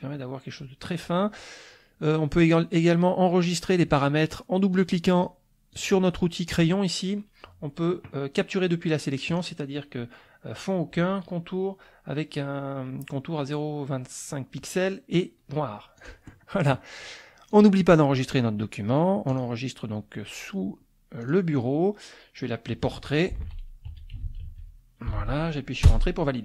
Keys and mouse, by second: 0.9 middle click, 1.3 click, 4.7 click, 5.2 click, 5.7 click, 9.3 click, 16.0 click, 17.5 click, 19.3 click, 21.2 click, 23.3-25.6 typing, 25.9 Return.